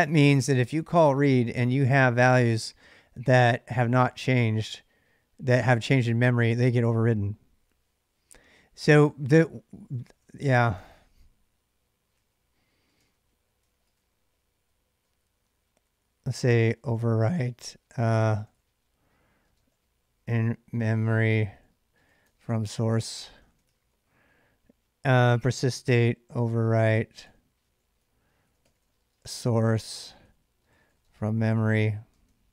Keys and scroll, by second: 0.0-1.3 typing, 5.7 ctrl+[, 5.9 k, 9.8 ctrl+[, 9.8 j, 10.0 j, 10.6 k, 12.0-24.2 typing, 25.5-32.5 typing.